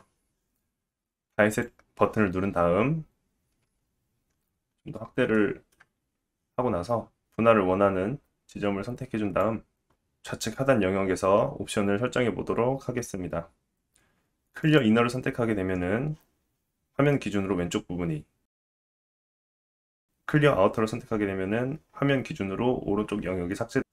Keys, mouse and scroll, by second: 1.5 click, 4.0-5.2 scroll up 5, 5.4 shift+middle click, 6.0-7.2 scroll up 1, 7.2 ctrl+z, 7.5 click, 14.7-17.7 drag, 19.0 click, 19.7 click.